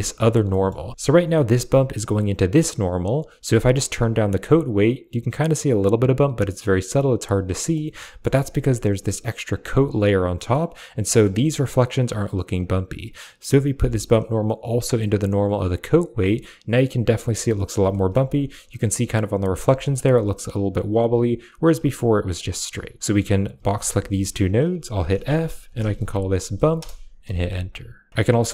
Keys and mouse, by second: 0.4 middle click, 1.5-2.6 drag, 3.4 middle click, 3.9-7.1 drag, 7.5 middle click, 7.9 middle click, 10.2 middle click, 11.0 shift+middle drag, 12.9 click, 13.8-15.7 drag, 17.8 shift+middle drag, 19.6 shift+middle click, 21.0-22.1 drag, 23.0 click, 23.0 a, 23.4 b, 23.5 click, 23.8 g, 24.1 drag, 25.0 f, 27.1 a, 27.7 click.